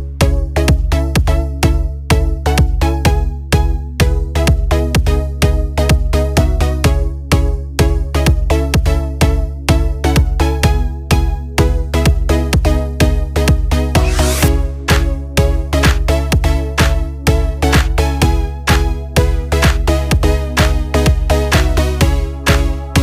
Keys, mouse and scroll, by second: 0.0-1.2 typing, 3.0 click, 5.5-14.0 drag, 15.1-20.7 drag, 20.7 click.